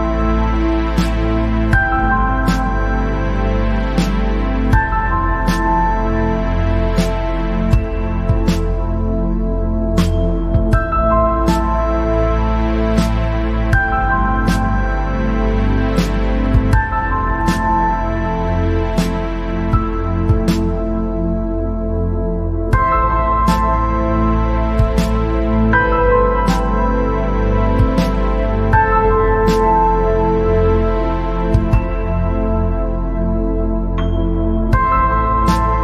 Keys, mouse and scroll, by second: 0.4-1.0 scroll down 2, 1.7-2.7 drag, 3.0-3.4 scroll down 3, 3.4 middle click, 4.3 scroll up 1, 5.1-5.4 scroll up 2, 5.7 scroll down 1, 5.9-7.5 middle drag, 7.5 scroll up 1, 8.8 scroll down 1, 9.0 middle click, 9.7-10.3 scroll up 4, 11.3 scroll up 2, 12.9 scroll down 3, 13.3 scroll up 3, 13.9-15.7 middle drag, 15.7 scroll down 2, 16.2 scroll up 1, 17.7-19.7 drag, 19.7 scroll down 3, 20.4 scroll up 1, 21.1-22.6 drag, 22.6-22.9 scroll up 2, 23.3-24.5 middle drag, 24.5 scroll down 4, 24.9-25.7 scroll up 5, 26.1 scroll down 2, 26.3 middle click, 27.2 scroll up 1, 27.7 scroll up 2, 29.5-31.1 drag, 33.2 alt+click, 34.1 scroll down 3, 34.6-35.2 scroll up 2, 35.2 scroll down 1.